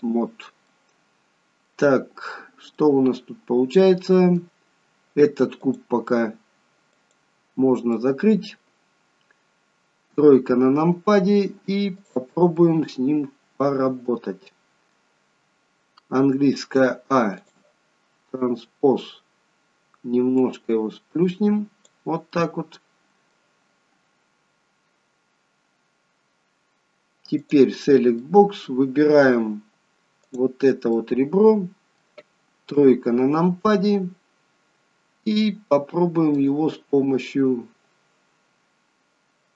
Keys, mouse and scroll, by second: 0.6 middle click, 2.7 middle click, 5.8 click, 6.9 click, 7.9 middle click, 10.0 KP_3, 11.9 click, 12.6 middle click, 16.1 a, 17.4 click, 20.4 click, 22.3 middle click, 27.3 click, 28.2 middle click, 30.2 click, 30.9 middle click, 32.7 KP_3, 36.3 click.